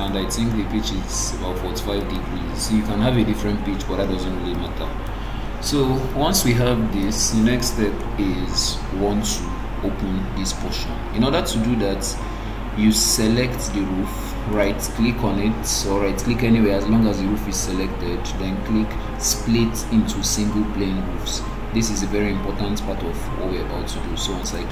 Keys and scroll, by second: 11.0 Escape.